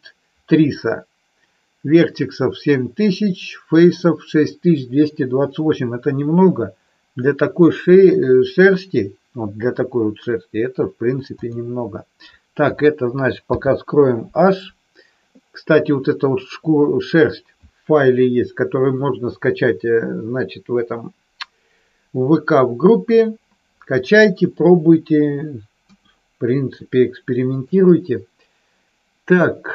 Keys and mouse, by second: 13.4 h, 25.8 KP_1, 27.5-29.4 middle drag.